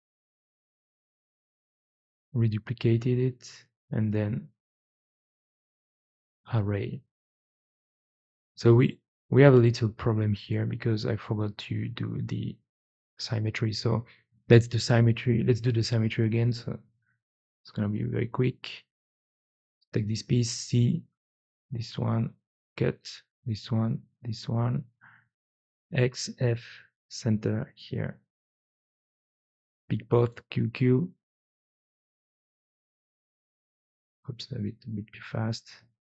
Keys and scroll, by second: 0.2 q, 1.2 q, 10.1 ctrl+z, 10.5 ctrl+z, 10.9 ctrl+z, 11.4 ctrl+z, 19.5-20.4 typing, 23.2 x, 24.9 alt+x, 26.1 f, 28.3 4, 30.1 q, 30.3 q, 34.2 q, 34.6 q.